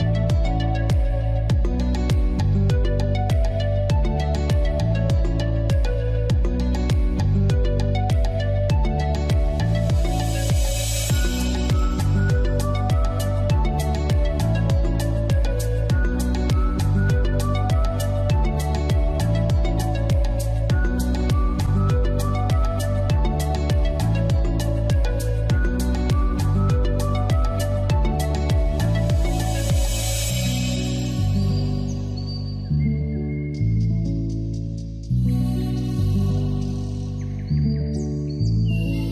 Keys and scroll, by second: 22.0 x.